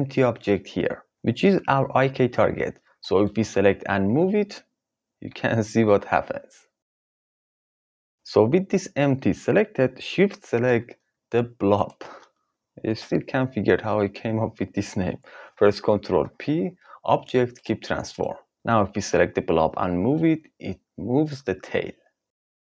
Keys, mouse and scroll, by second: 4.0 g, 11.7 shift+click, 16.1 ctrl+p, 18.1 click, 19.5 g.